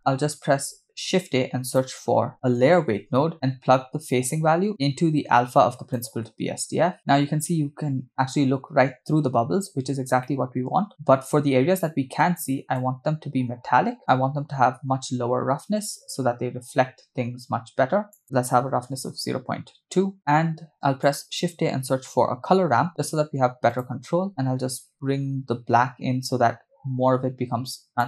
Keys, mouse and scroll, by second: 1.0 shift+a, 4.3-6.2 drag, 7.1-8.0 scroll down 7, 10.2 middle click, 12.8-14.0 drag, 14.1-19.3 drag, 20.2 middle click, 20.9 shift+a, 24.3-28.0 drag.